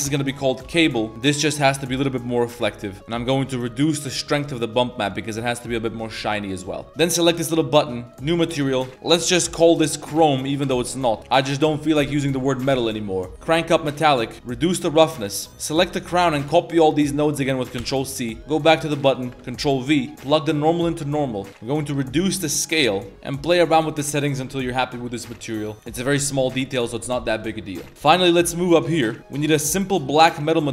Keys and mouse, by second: 1.1 click, 2.0-2.3 middle drag, 2.5 shift+middle drag, 2.9 middle click, 4.3 click, 5.4 middle drag, 5.9 middle drag, 5.9 a, 6.3-6.6 middle drag, 6.9 a, 7.2 click, 8.0 click, 8.6-10.6 drag, 11.2 middle click, 13.5 click, 14.4 click, 15.5 a, 15.9 b, 17.0 click, 17.8 ctrl+c, 18.1 drag, 18.6 click, 19.0 click, 19.4 ctrl+v, 19.8 g, 20.2 click, 21.3 middle click, 21.6-23.9 drag, 24.2 middle click, 24.5 a, 24.6 a, 24.6 middle drag, 25.4 middle drag, 25.8 middle click, 26.2 middle drag, 27.9 ctrl+s, 28.0 middle click, 28.4 shift+click, 28.5 middle click, 29.0 click.